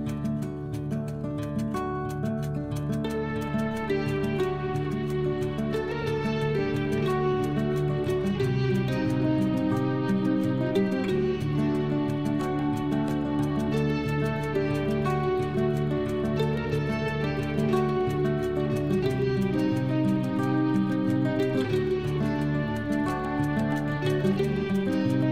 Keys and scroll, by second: 4.9 Up.